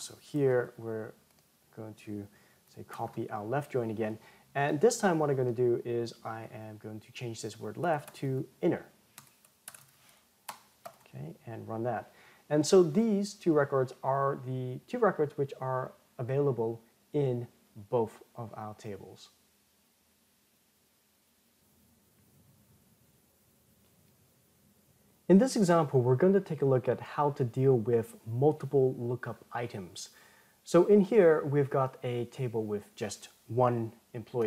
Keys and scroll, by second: 0.6 ctrl+c, 3.2 ctrl+v, 10.9 ctrl+Return.